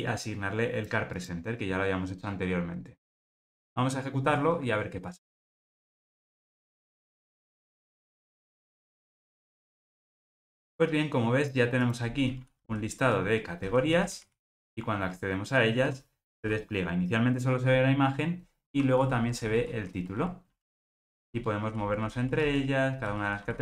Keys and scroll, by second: 5.5 ctrl+r.